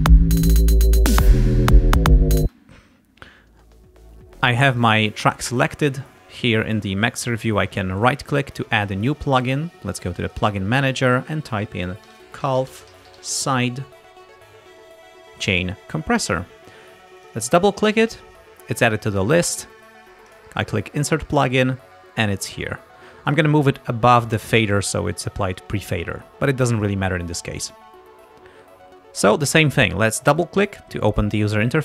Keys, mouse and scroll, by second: 2.4 space, 4.8 click, 8.0 right click, 10.3 click, 11.9-13.9 typing, 17.2 click, 20.3 click, 23.3-24.6 drag, 30.3 click.